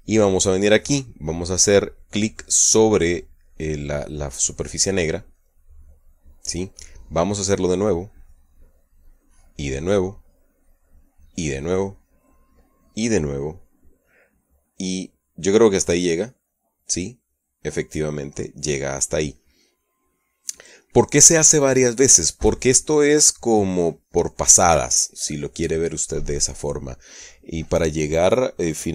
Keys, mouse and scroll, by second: 6.0 click, 9.0 click, 10.8 click, 12.3 click, 14.0 click, 16.8 click, 17.6 click, 18.3 click, 18.7 click, 19.5 click.